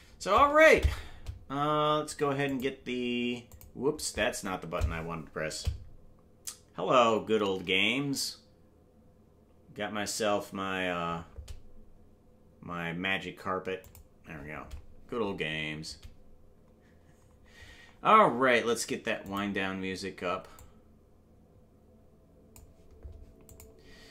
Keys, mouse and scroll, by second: 0.1 ctrl+space, 2.0 ctrl+s.